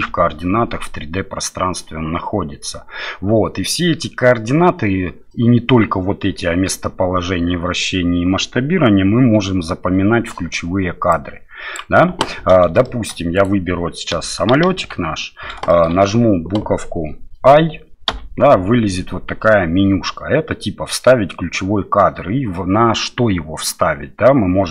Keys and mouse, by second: 12.8 shift+middle click, 15.7 middle click.